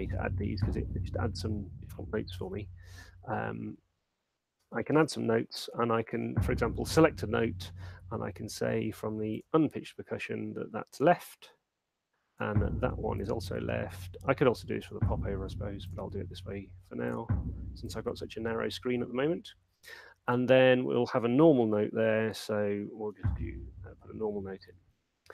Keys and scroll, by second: 23.0 6.